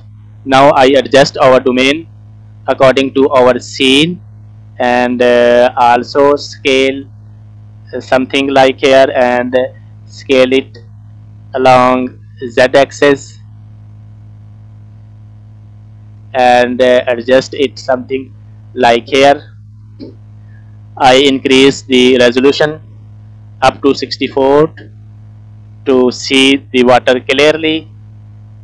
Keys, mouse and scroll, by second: 0.4 KP_1, 2.4 g, 6.0 s, 9.2 g, 12.0 s, 15.6 g, 17.9 middle click, 18.4-19.1 scroll up 2, 19.1-19.4 scroll down 3, 19.4 middle click, 20.2 shift+middle click, 20.6 scroll up 2, 21.2 middle click, 22.9-25.1 drag, 25.6 scroll up 3, 26.8-27.5 scroll down 1, 27.6 shift+middle click, 28.1 scroll down 2, 28.3 middle click.